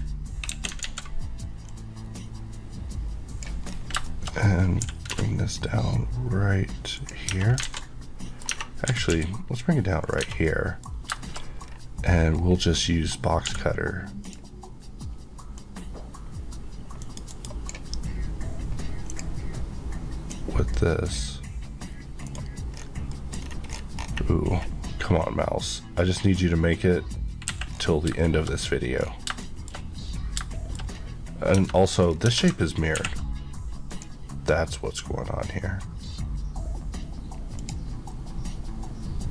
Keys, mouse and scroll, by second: 0.5 KP_1, 0.9 alt+z, 1.7 click, 2.5 click, 3.7 scroll, 4.0 shift+scroll up 1, 4.1 shift+middle click, 4.3 shift+scroll, 4.3-4.7 scroll up 1, 4.9-5.2 typing, 7.0 click, 7.4 Tab, 7.4 scroll down 2, 7.7 alt+z, 7.9 middle click, 8.6 Tab, 8.9 g, 9.1 z, 10.1 click, 10.2 Tab, 10.5 middle click, 11.7 scroll, 11.7-12.1 scroll down 1, 12.1 scroll up 1, 12.8 click, 13.5 d, 14.3 click, 17.1 right click, 19.1 click, 20.3 click, 21.0 click, 22.3 right click, 22.8 scroll down 1, 23.2 middle click, 23.4 scroll up 1, 23.7 scroll down 1, 24.0 scroll, 24.1 scroll up 1, 25.7 click, 27.7-28.2 scroll down 2, 28.2 shift+middle click, 28.6 scroll up 1, 29.9 middle click, 30.6 middle click, 30.9 scroll up 1, 31.6 Tab, 32.1 scroll down 1, 32.3 Tab, 33.9 click, 37.7 click, 37.8 Left.